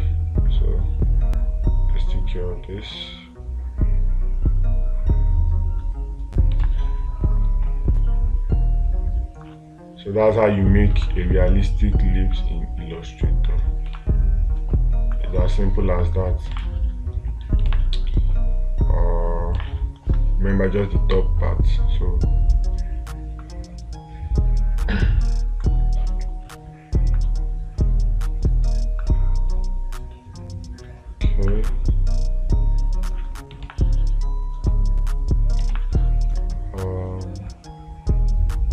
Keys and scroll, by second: 7.1 space, 11.4 space, 14.4 space, 18.1 space, 20.0 space, 34.1 space, 36.2 space.